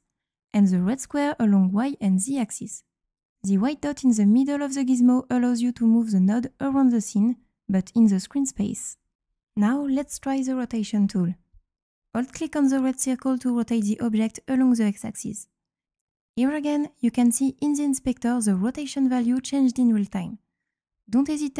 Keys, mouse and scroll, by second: 0.5-2.5 drag, 5.6-8.7 drag, 10.9 click, 14.8-18.3 drag.